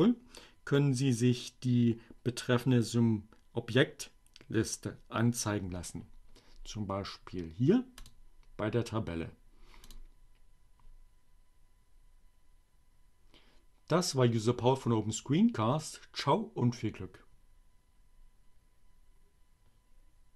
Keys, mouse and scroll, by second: 7.6 click, 9.5 click.